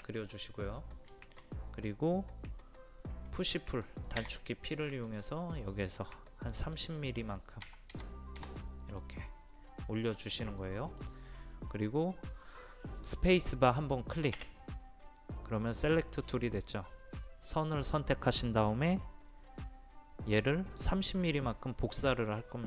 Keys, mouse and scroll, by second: 1.2 shift+middle click, 4.2 p, 4.9-6.0 drag, 7.6 KP_3, 8.0 KP_0, 10.5 middle click, 11.8-12.1 scroll up 1, 15.0 space, 17.3 click.